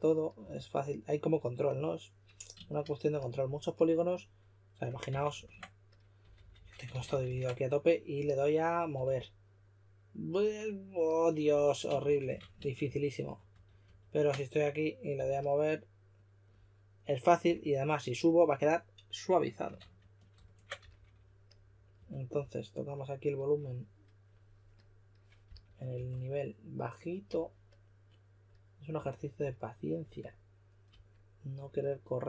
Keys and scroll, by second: 0.3 2, 5.0 super+d, 5.3 super+d, 6.1-6.5 typing, 6.8 super+d, 7.0 super+d, 7.2 super+d, 8.1-8.9 typing, 11.9 shift+f, 12.2 shift+f, 12.5 super+z, 12.8 super+z, 13.1 super+z, 15.1 2, 17.4 d, 19.7 super+z, 20.3 super+z, 20.7 s, 21.9 s, 25.4 s, 25.9 s, 28.9 s.